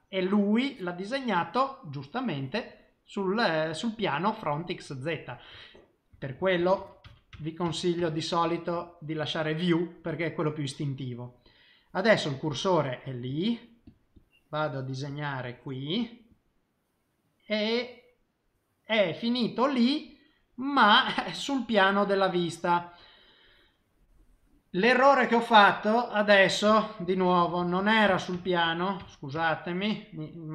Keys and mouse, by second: 1.1 middle click, 2.2 middle click, 4.7 middle click, 6.1 ctrl+z, 6.4 ctrl+z, 6.6 ctrl+z, 6.8 ctrl+z, 7.1 ctrl+z, 7.3 ctrl+z, 7.7 ctrl+z, 8.0 ctrl+z, 9.2 click, 10.8 middle click, 12.2 click, 13.3 click, 13.8 click, 14.1 click, 14.6 click, 15.1 click, 15.4 click, 16.0 click, 16.3 click, 16.8 middle click, 23.0 middle click, 26.0 middle click, 27.0 ctrl+z, 27.4 ctrl+z, 27.6 ctrl+z, 27.8 ctrl+z, 28.1 ctrl+z, 28.3 ctrl+z, 28.6 ctrl+z, 29.0 ctrl+z, 29.4 ctrl+z, 30.0 middle click.